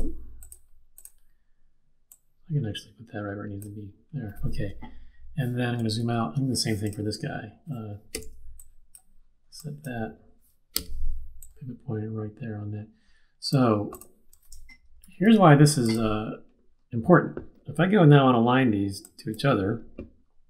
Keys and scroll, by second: 5.8 super+-, 6.3 super+-, 8.1 z, 10.7 q, 15.0 super+-.